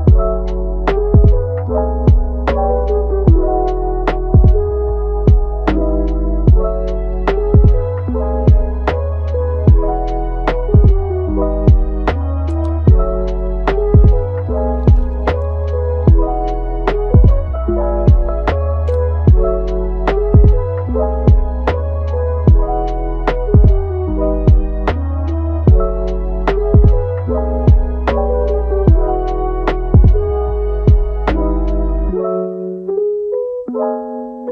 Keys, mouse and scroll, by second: 0.4 click, 1.0 middle click, 1.7 alt+s, 3.7 alt+s, 5.1 g, 8.7 middle click, 9.4 click, 9.8 g, 11.6 middle click, 12.4 click, 13.0 click, 13.5 middle click, 14.3 click, 14.8 middle click, 15.4 g, 19.2 alt+s, 20.4 middle click, 21.1 g, 22.5 click, 22.8 g, 23.5 click, 24.0 middle click, 24.3 g, 25.6 middle click, 26.1 click, 26.4 g, 27.5 g, 28.8 alt+s, 29.7 click, 30.1 alt+s, 31.7 click, 33.2 click, 33.5 g.